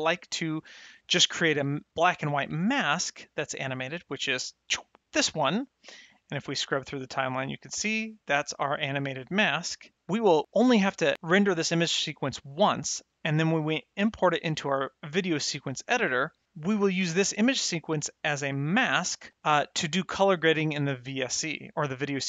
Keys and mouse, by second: 3.2 middle click, 4.4 ctrl+shift+click, 6.3 click, 19.8 click.